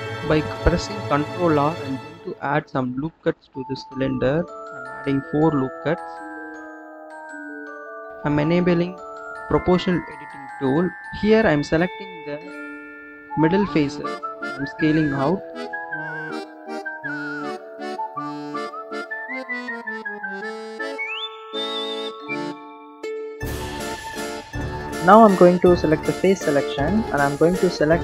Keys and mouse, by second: 0.8 ctrl+r, 6.8 click, 9.8 click, 12.7 alt+shift+click, 14.7 s, 21.6 click, 22.6-23.3 drag, 23.8 click, 25.1-25.8 drag, 26.3 shift+click.